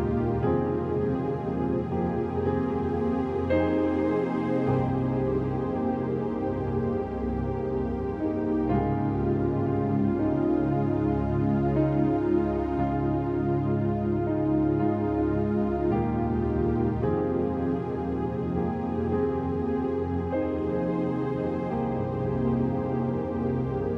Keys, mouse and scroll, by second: 0.4 scroll down 1, 0.6 click, 0.9 right click, 1.8-3.5 drag, 3.5 scroll up 1, 4.4-8.9 drag, 8.9-9.8 scroll up 1, 9.8-11.6 drag, 11.6 scroll down 1, 11.9 space, 11.9 click, 12.1 space, 12.2 scroll down 1, 12.5 space, 12.6 click, 12.7 space, 13.4 right click, 14.5-19.2 drag, 19.2 F5, 21.4 5, 22.0 click, 22.6 g, 23.2-23.9 drag.